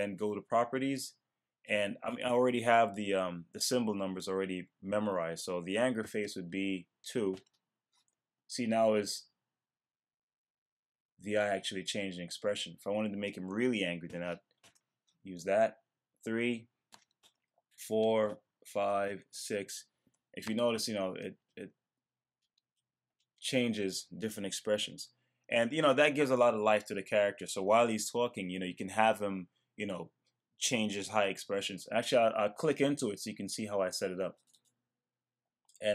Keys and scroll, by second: 7.3 Return, 14.6 Return, 17.0 Return, 17.2 Return.